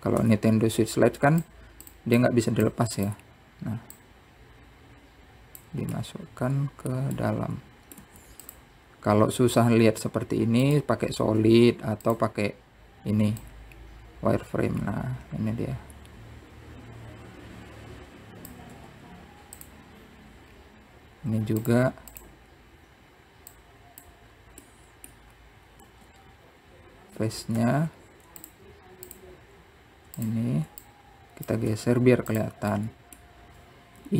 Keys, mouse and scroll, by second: 0.9-1.5 scroll down 3, 1.5 Tab, 2.6 click, 3.9 click, 5.2 click, 7.2-9.3 middle drag, 10.3 scroll up 3, 11.1 z, 12.6 z, 14.5 click, 19.9 z, 21.7-22.8 scroll down 3, 22.8 click, 23.3 click, 24.8 click, 25.5-25.9 scroll up 2, 25.9 middle click, 26.5 scroll up 2, 27.1 b, 28.9 Tab, 29.6 shift+click, 30.3 shift+click, 31.4 shift+click, 32.1 click, 32.9 b, 34.0 middle click.